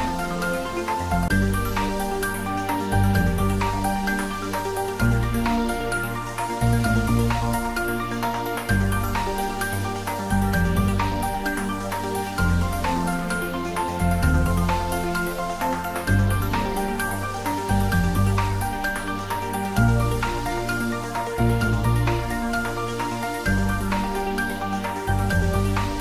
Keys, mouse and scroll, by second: 0.3-1.0 scroll up 1, 6.7 scroll up 1, 8.2 alt+shift+click, 11.2 shift+scroll down 1, 15.4-16.4 shift+scroll down 1, 16.4 shift+click, 19.5-25.9 middle drag, 25.9 scroll up 1.